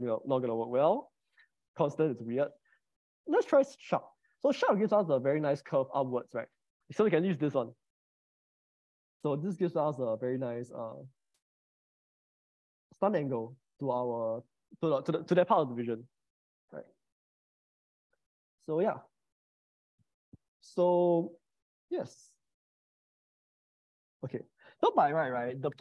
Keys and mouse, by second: 1.1 click, 2.6-3.9 drag, 4.5-7.1 middle drag, 8.4 Tab, 8.7 middle click, 9.2 click, 9.6 click, 11.4 click, 13.3-16.1 middle drag, 17.3 middle click, 19.8-20.9 middle drag.